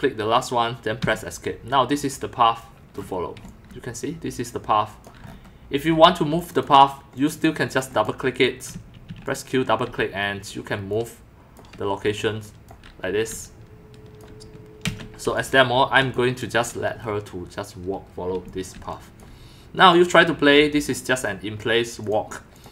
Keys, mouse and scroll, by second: 1.0 Escape, 3.4-5.2 typing, 6.3 click, 6.5 click, 7.1 click, 7.3 click, 7.7 click, 7.9 click, 8.9-10.0 typing, 9.3 click, 9.4 click, 10.9 click, 12.0-14.2 typing, 12.1-12.4 drag, 12.5 click, 13.3 click, 13.4 click, 14.8 ctrl+z, 15.3-15.8 drag, 18.2-19.2 typing, 19.9 click, 22.0 click, 22.5 click.